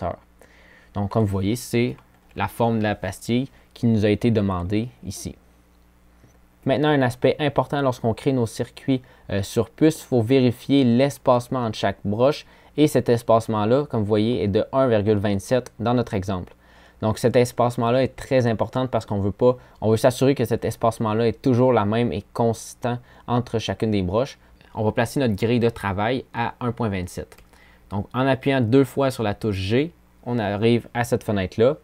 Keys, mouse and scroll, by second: 16.3-16.8 scroll down 2, 25.8 g.